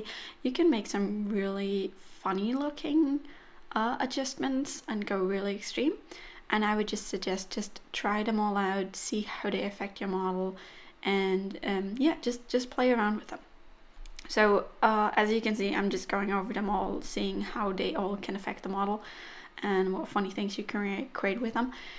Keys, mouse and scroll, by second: 2.9 click, 6.3 click, 12.6 click, 15.3 middle click, 16.4-16.9 scroll up 1, 16.9 middle click, 16.9 scroll up 2, 17.7 scroll up 1, 17.8-18.2 scroll down 1, 20.3 click, 21.6 scroll down 3, 21.8 middle click.